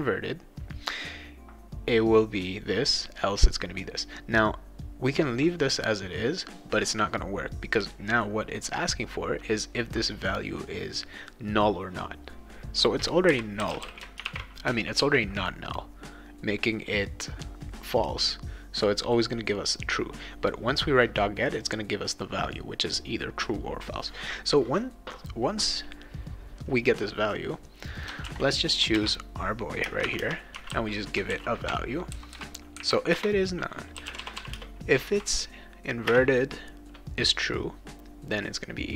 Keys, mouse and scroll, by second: 13.0-14.7 typing, 15.0 ctrl+s, 21.6 click, 27.8 click, 27.9 click, 28.2 ctrl+c, 28.7 click, 28.9 ctrl+v, 29.8-31.2 typing, 31.3 ctrl+s, 33.1 Return, 33.7-36.1 typing.